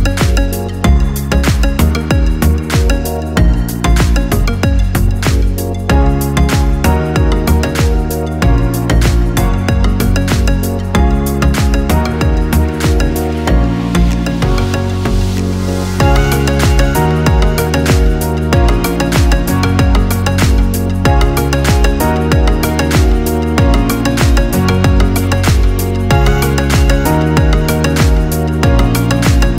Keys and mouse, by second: 0.2-2.8 right drag, 2.8 click, 4.4 shift+click, 5.4 typing, 7.8-10.4 right drag, 10.4-12.0 drag, 12.8 g, 16.9 click, 17.8 g, 23.5 click, 26.0 click, 27.6 shift+click, 28.4 j.